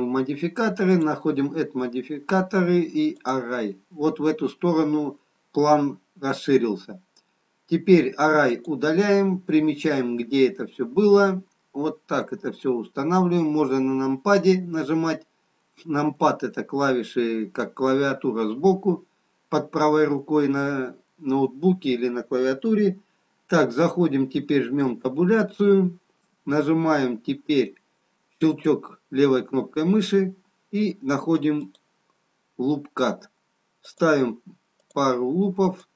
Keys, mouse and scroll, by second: 8.4 click, 11.2 middle click, 25.8 Tab, 28.5 click, 31.8 click, 33.9 click.